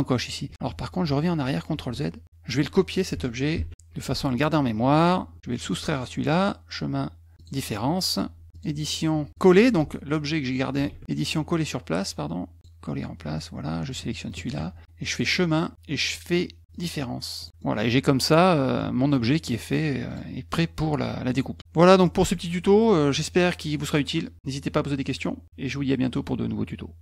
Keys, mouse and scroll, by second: 1.5 ctrl+z, 3.5 ctrl+c, 5.9 click, 7.4 click, 8.5 click, 9.3 click, 10.9 ctrl+z, 12.6 click, 14.3 shift+click, 15.1 click, 16.7 click, 17.4 click, 17.6 middle click, 18.8 middle click, 20.1 click.